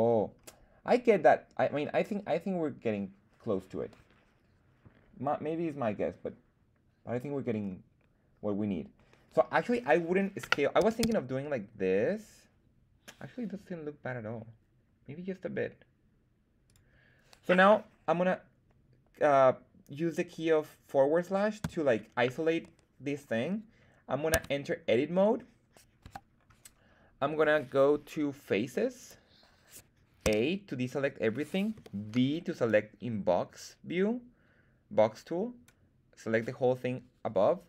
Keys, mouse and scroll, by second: 0.0-0.6 scroll down 3, 1.6-2.0 scroll up 1, 7.5-8.9 scroll up 1, 8.9-9.8 scroll up 1, 10.7 s, 10.9 z, 16.6 click, 21.8 /, 24.3 Tab, 24.8 middle click, 25.9 KP_1, 28.9 click, 30.2 a, 31.7 b.